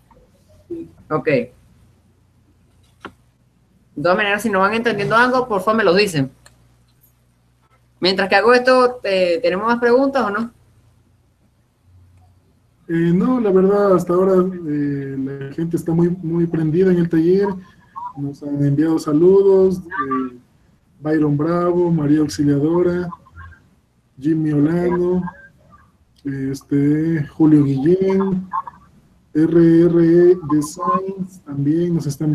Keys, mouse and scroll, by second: 0.2-1.5 drag, 1.1-3.2 right drag, 3.2 middle click, 7.5-9.0 drag, 10.1-12.6 middle drag, 12.6-14.7 drag, 16.8-18.8 drag, 21.5-23.2 drag, 25.8-27.6 drag, 28.4-31.0 middle drag.